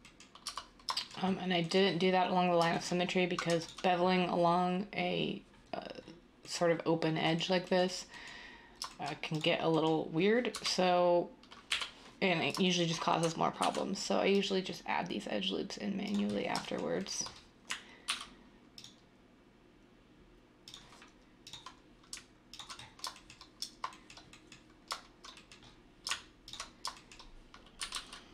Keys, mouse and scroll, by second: 0.4 Tab, 10.5 3, 11.6 7, 13.6 ctrl+r, 18.0 ctrl+r, 27.8 typing.